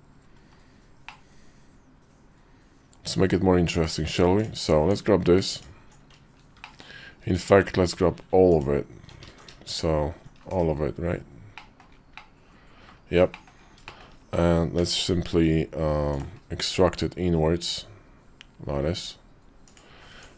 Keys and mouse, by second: 0.8-3.8 middle drag, 4.6 Tab, 6.4 shift+click, 8.3 alt+shift+click, 9.2 ctrl+z, 9.5 alt+shift+click, 10.4 /, 11.3 middle click, 11.9 middle click, 13.1 middle click, 13.6 shift+middle click, 14.5 q, 19.9 Tab.